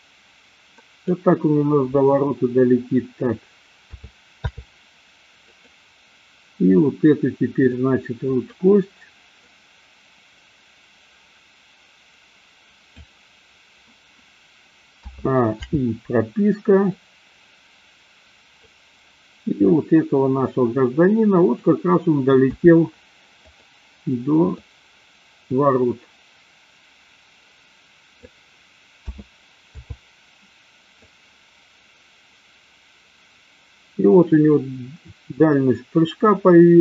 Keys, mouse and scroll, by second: 4.0 a, 4.6 i, 5.7 click, 7.7 click, 8.2 click, 9.5-13.2 drag, 15.1 a, 15.7 i, 17.2-19.0 drag, 22.6 a, 23.3 click, 24.5-28.3 drag, 29.1 a, 29.8 i, 31.2-36.8 drag.